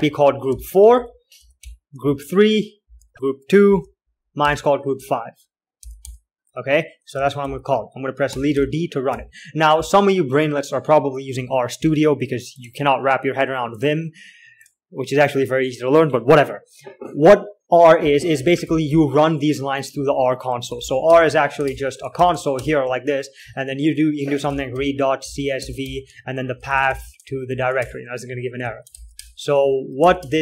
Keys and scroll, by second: 0.0-4.1 typing, 5.5-9.4 typing, 18.9-19.6 typing, 21.0 typing, 21.1 alt+x, 21.4 Return, 22.0 alt+shift+Return, 22.5 r, 22.9 Return, 25.1-30.4 typing.